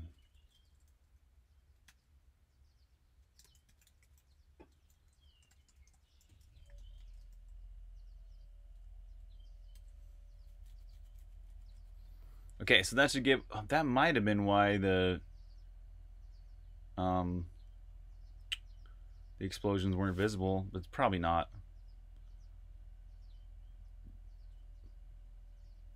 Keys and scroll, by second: 0.0-7.6 typing, 9.6 super+b, 9.8-10.8 typing, 10.0 super+h, 21.0 super+Tab.